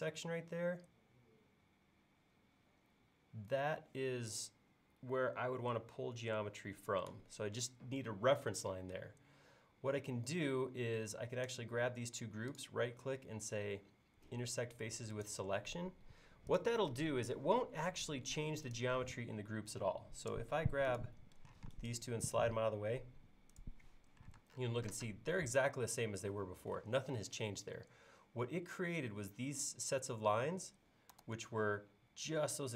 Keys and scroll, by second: 21.6 m, 24.5 space, 31.3 super+z.